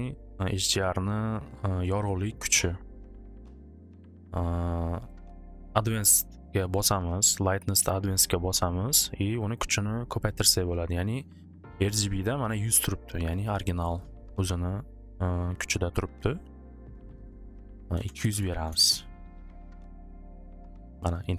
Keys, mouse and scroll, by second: 0.9 click, 5.1 click, 7.2-8.8 drag, 9.4 click, 9.5 click, 12.4 click, 12.6 click, 13.3 click, 13.4 click, 17.7-19.1 typing.